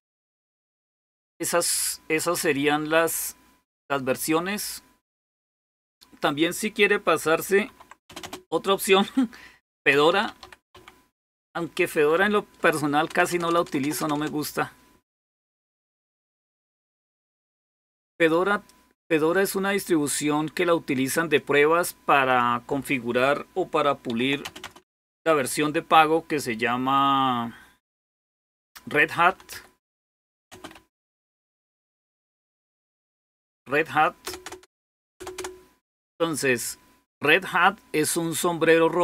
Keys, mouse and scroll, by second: 0.0-0.5 typing, 7.5-8.0 typing, 9.2-11.0 typing, 12.9-13.3 typing, 13.5 Return, 13.6 Return, 19.2-21.9 drag, 19.2 typing, 21.7-22.4 typing, 22.1 click, 23.9-25.2 typing, 28.9-35.2 typing, 37.5-39.0 drag.